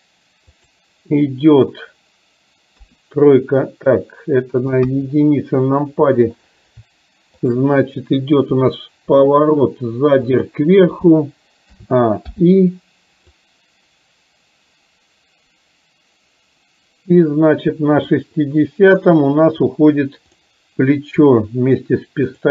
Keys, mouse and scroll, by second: 0.7 click, 3.0 KP_3, 4.1-4.7 middle drag, 5.7 KP_1, 7.3 shift+click, 9.2 r, 11.8 a, 12.3 i, 13.5-18.2 drag, 20.3 click, 22.3 shift+click.